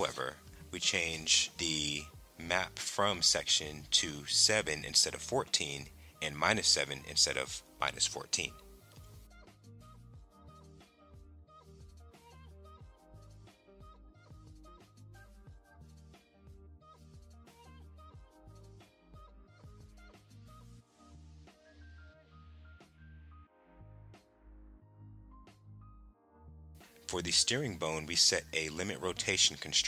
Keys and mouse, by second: 1.2 click, 1.8 click, 2.9-4.0 drag, 5.0 click, 6.9-10.7 drag, 11.5 click, 12.2 click, 14.0 click, 14.7-15.9 drag, 16.6-18.5 drag, 19.3-23.8 drag, 26.0 click, 28.6-29.8 drag.